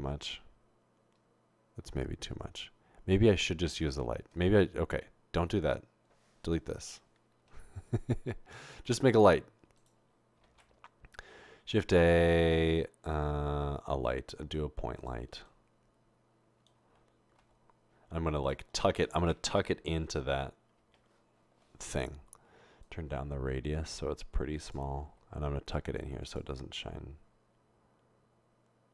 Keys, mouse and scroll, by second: 7.6 Delete, 10.8 a, 17.6 typing, 20.1-20.8 typing, 22.9-24.7 drag, 25.2 typing, 26.8 typing.